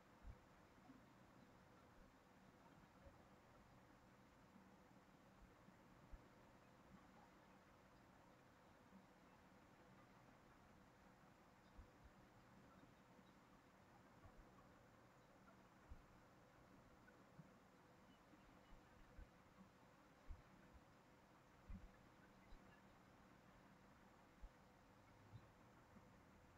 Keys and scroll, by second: 4.6 ctrl+c, 4.8 ctrl+v.